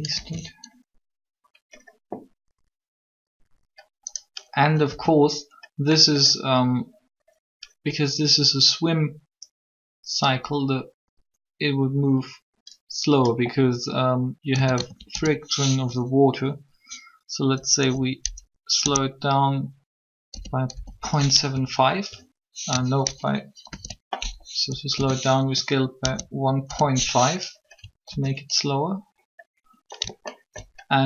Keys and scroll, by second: 0.1 alt+a, 4.6 a, 4.7 a, 14.4 a, 14.6 a, 15.1 s, 16.6-17.6 typing, 18.7 ., 20.0-20.7 typing, 23.7 ctrl+z, 24.9-26.6 typing, 28.1 alt+a.